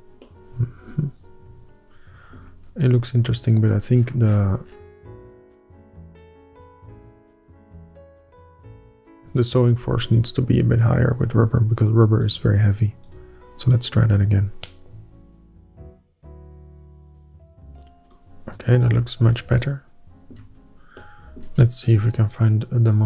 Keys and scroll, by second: 8.5 2, 9.2 Return.